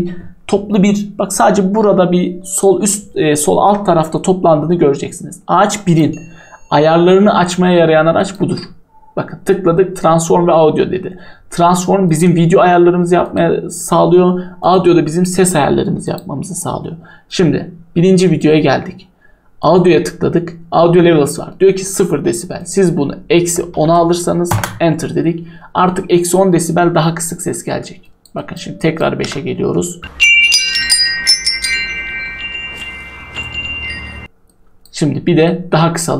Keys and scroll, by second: 23.1-24.4 typing, 24.5 Return, 27.1 typing, 29.2 n, 34.0 0.